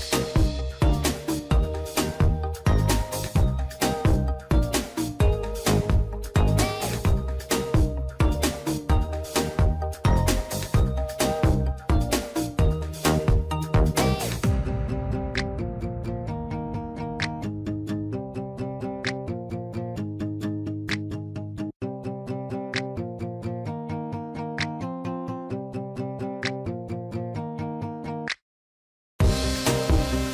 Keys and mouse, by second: 0.9 click, 2.9 shift+middle click, 3.6 shift+middle click, 4.9-7.3 drag, 9.9 shift+middle click, 11.0 ctrl+r, 13.6 ctrl+r, 18.2 shift+middle click, 19.1 click, 20.2 click, 21.2-23.1 drag, 23.4 click, 23.7 click, 25.0 click, 25.3 click, 26.5 shift+middle click, 27.0 click, 27.3 click, 28.7 click, 30.1-30.3 drag.